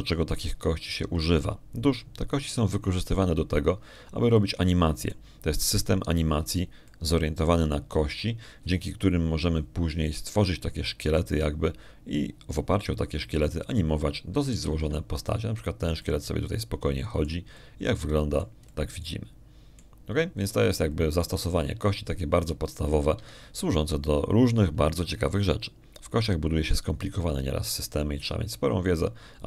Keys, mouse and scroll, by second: 4.3 click, 6.2 middle click, 7.5-8.6 middle drag, 8.7 middle click, 16.5 alt+a, 17.9-19.3 drag, 25.0 Escape, 28.1 click.